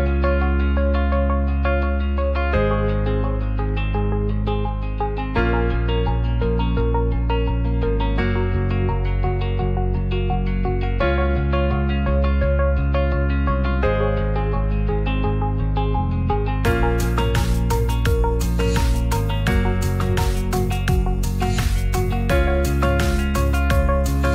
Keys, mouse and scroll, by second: 0.1 click, 0.8 alt+z, 1.1 middle click, 1.8 Tab, 2.4 s, 4.9 s, 8.2-8.6 middle drag, 9.2 shift+middle click, 9.7 Tab, 10.8 shift+click, 11.6 alt+z, 12.2 shift+click, 12.8 shift+click, 13.2 s, 14.7 click, 15.3 click, 15.8 f, 16.4 ctrl+right click, 17.0 ctrl+z, 17.9 g, 17.9 z, 18.9 click, 19.3 Tab, 20.2 s, 21.8 middle drag, 22.2 alt+z, 22.5 click, 22.7 click, 22.8 s.